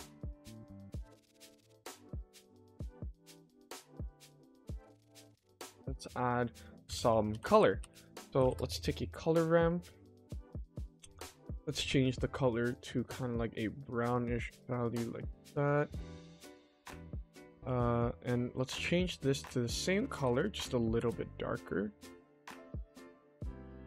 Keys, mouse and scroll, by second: 0.3 middle click, 1.6-4.3 scroll down 1, 4.3-4.9 scroll down 2, 5.4 middle click, 6.7 shift+a, 11.0 click, 11.5 click, 17.8 click, 18.3 click, 18.5 click, 19.6 click, 20.0 ctrl+c, 20.5 click, 20.9 ctrl+v, 21.4 click, 22.4 click.